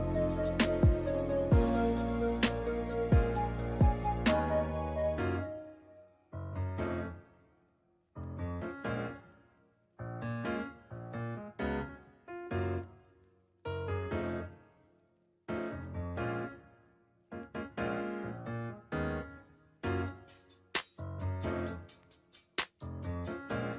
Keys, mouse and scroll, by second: 1.2 shift+a, 2.6 s, 4.1 ctrl+middle click, 5.3 shift+middle click, 6.2 Tab, 6.6 2, 7.0 right click, 7.3 shift+middle click, 8.4 e, 10.2 ctrl+middle click, 10.9 right click, 11.7 ctrl+b, 14.6 Tab, 15.4 ctrl+2, 15.7 w, 16.5 Tab, 17.3 ctrl+r, 18.8 s, 21.5 Tab, 21.9 shift+middle click, 23.0 s.